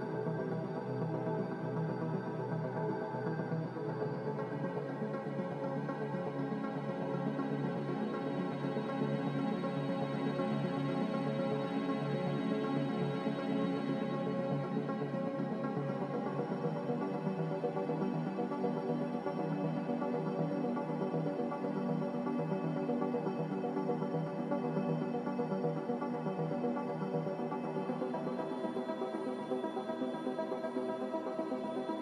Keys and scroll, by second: 2.5 c, 6.9 z, 15.8 5, 16.3-18.8 Return.